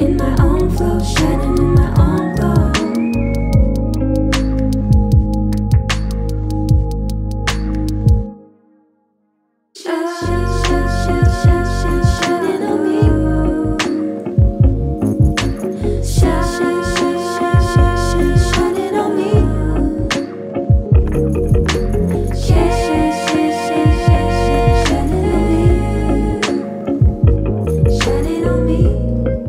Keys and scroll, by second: 22.5 ctrl+=.